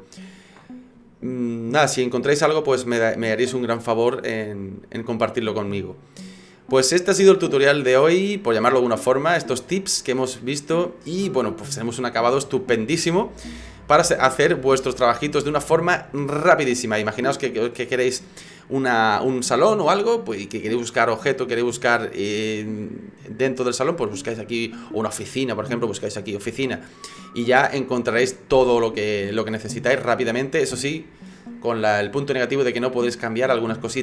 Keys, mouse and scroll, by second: 9.7 right click.